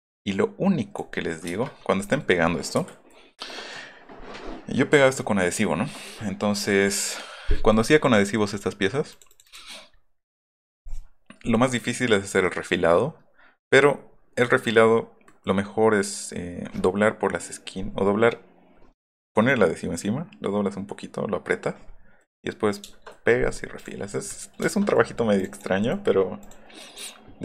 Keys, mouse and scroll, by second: 1.4 Return, 1.9 middle click, 2.7 Escape, 7.5 middle click, 9.1 click, 9.3 click, 9.9 middle click, 10.2 middle drag, 10.8 middle drag, 14.2-14.9 middle drag, 22.0 middle click, 22.9 shift+middle click, 23.7 click, 24.3 middle click, 25.3 click, 25.5 click, 25.8-26.3 scroll up 2, 26.4 click.